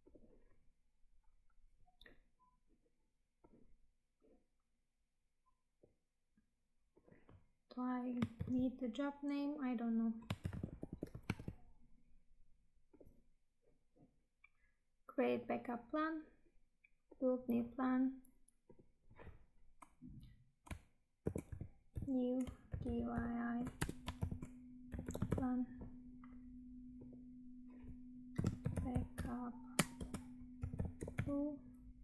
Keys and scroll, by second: 8.3 ctrl+c, 10.4 ctrl+v, 11.5 Tab.